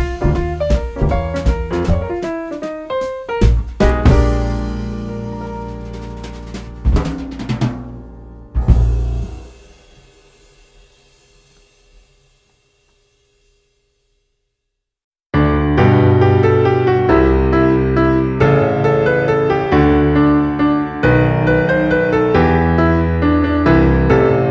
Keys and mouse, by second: 0.6 middle click, 1.0 x, 1.9 click, 2.9 shift+middle click, 4.7 shift+a, 6.2 click, 6.8 middle click, 7.1 s, 8.8 click, 9.1 middle click, 10.4 g, 10.6 z, 11.0 click, 11.2 KP_3, 12.1 s, 13.3 click, 14.2 g, 16.0 click, 16.9 middle click, 17.9 x, 20.4 click, 21.2 s, 22.0 click, 22.2 right click, 23.2 click, 24.3 click.